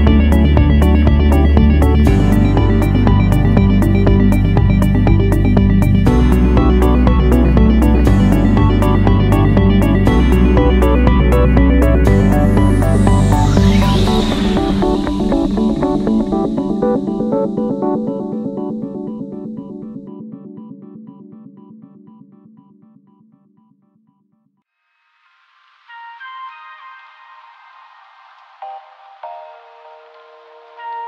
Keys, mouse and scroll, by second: 2.0 7, 2.4 0, 2.8 Return, 19.4 click, 24.2 2, 24.5 5, 24.8 Return.